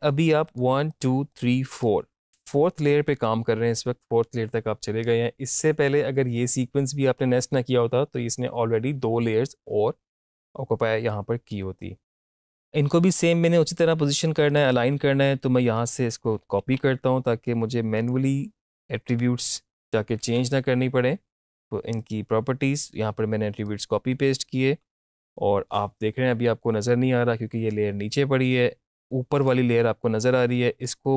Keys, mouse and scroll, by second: 0.5 click, 6.4 click, 14.5 click, 16.6 ctrl+c, 18.0 click, 20.1 ctrl+alt+v, 23.5 click, 29.4-31.1 drag.